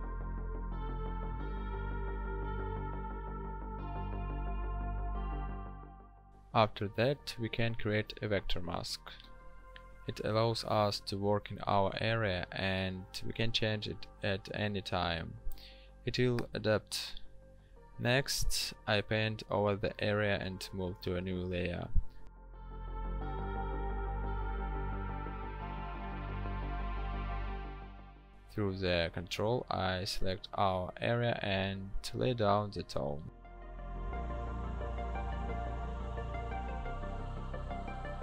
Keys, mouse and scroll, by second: 0.5 ctrl+click, 6.7 right click, 9.6 b, 26.4 ctrl+shift+n, 29.3 ctrl+click.